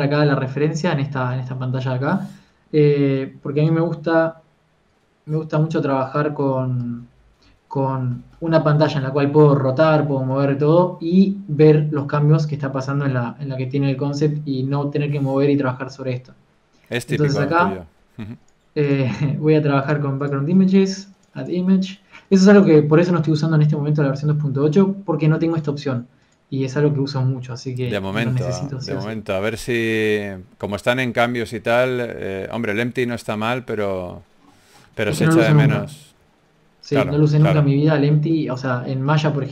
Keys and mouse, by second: 0.0 n, 2.6 n, 3.9-5.5 drag, 17.9 n, 21.9-28.6 drag, 29.4 n, 32.3 n, 33.9-35.5 drag, 36.6 n, 37.8 middle click, 38.0 click.